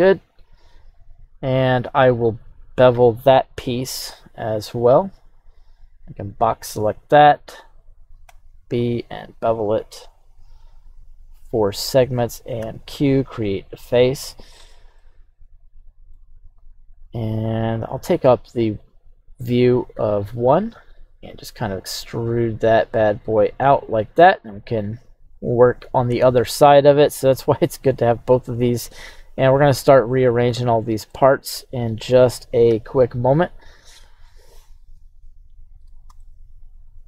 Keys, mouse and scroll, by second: 13.7 click, 15.0-16.2 middle drag, 17.8 KP_1, 19.9 e, 23.7 click, 24.1-26.6 scroll down 1, 27.4 click, 28.2-30.0 scroll down 1, 30.0-30.5 scroll down 1, 31.1-32.1 middle drag, 32.7 KP_3, 33.5-34.1 scroll up 4, 36.2-37.0 shift+middle drag.